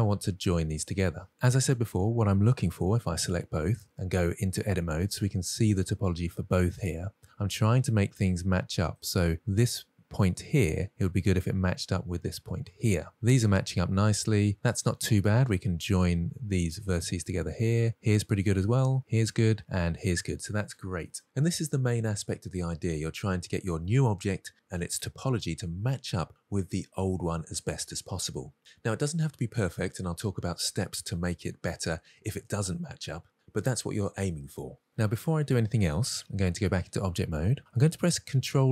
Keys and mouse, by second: 3.3 shift+click, 4.6 Tab, 6.7-7.2 middle drag, 8.2-8.9 middle drag, 12.5 middle click, 17.2-17.6 middle drag, 18.3-18.7 middle drag, 20.6-21.0 middle drag, 36.4 Tab.